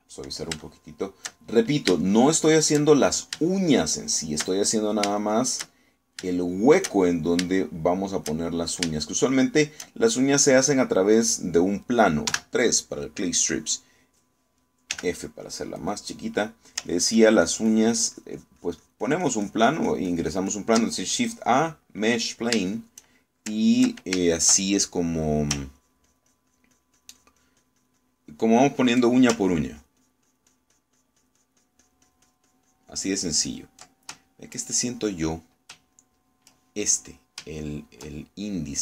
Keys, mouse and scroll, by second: 1.6 shift+middle click, 2.5-3.9 shift+middle drag, 4.3 shift+middle click, 6.0-7.3 shift+middle drag, 7.4-8.6 shift+middle drag, 13.3 3, 16.0 f, 16.9 click, 17.4 click, 17.9-21.8 ctrl+drag, 23.2 click, 23.7 shift+click, 25.4 shift+click, 26.9-30.1 ctrl+drag, 30.7-34.8 ctrl+drag, 35.3 shift+middle click, 36.1 shift+middle click, 37.0 shift+middle click, 38.5 shift+middle click.